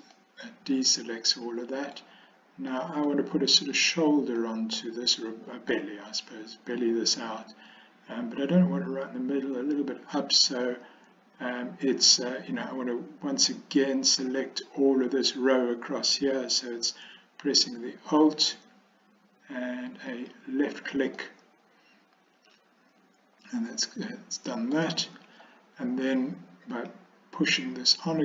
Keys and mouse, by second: 0.2-2.1 middle drag, 2.8 middle click, 4.5-5.8 middle drag, 20.2 alt+click, 21.2-24.9 middle drag, 26.8 click.